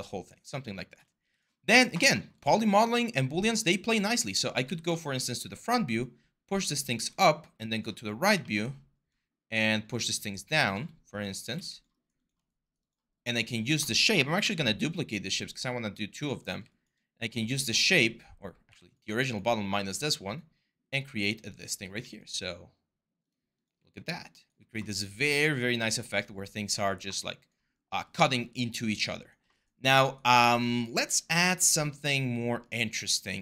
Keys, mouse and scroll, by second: 3.4 4, 4.4 w, 11.4 alt+5, 16.1 ctrl+d, 18.4 q.